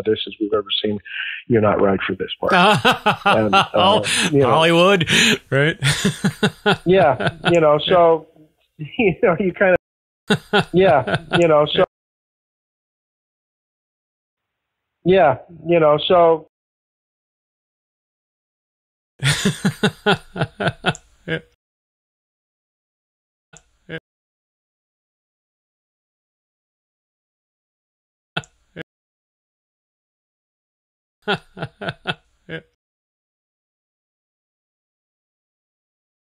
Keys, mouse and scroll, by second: 0.9 click, 9.7 space, 10.1 click, 10.1 space, 11.7 space, 13.5 click, 14.2 click, 14.3 space, 16.4 space, 17.3 click, 18.2 click, 19.0 click, 19.0 space, 21.5 space, 22.4 click, 22.6 click, 23.5 space, 23.9 space, 25.0-26.1 shift+drag, 26.8 ctrl+z, 28.3 space, 28.7 space, 29.4-30.5 shift+drag, 31.1 click, 31.1 space, 32.7 space, 33.2 click, 33.4 click, 34.8 ctrl+s, 35.9 click.